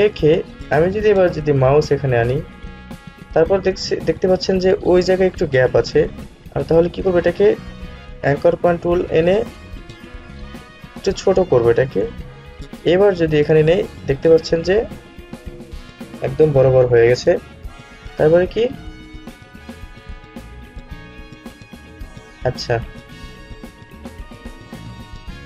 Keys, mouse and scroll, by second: 7.4-19.3 alt+drag, 20.1 click, 23.3 ctrl+z.